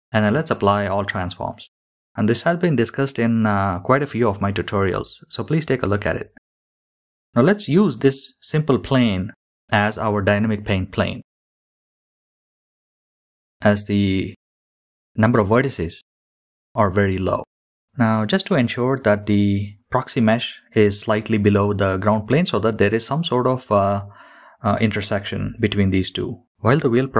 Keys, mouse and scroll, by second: 0.3 ctrl+a, 2.3-3.1 scroll up 7, 3.1 click, 3.1 shift+middle click, 3.1 scroll down 7, 3.2-13.2 drag, 13.9 click, 15.8-16.6 middle drag, 16.8-17.1 scroll down 4, 17.6 scroll down 2, 18.5 shift+middle drag, 18.7 click, 18.7 scroll down 1, 19.6-21.5 middle drag, 22.7 middle click, 24.8 click.